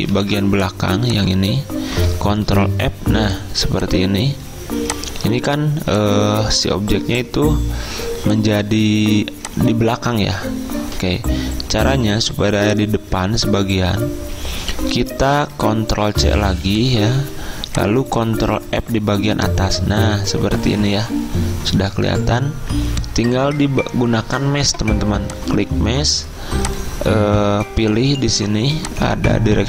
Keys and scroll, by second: 0.2 ctrl+alt+2, 2.5 ctrl+f, 16.1 ctrl+c, 18.9 ctrl+f.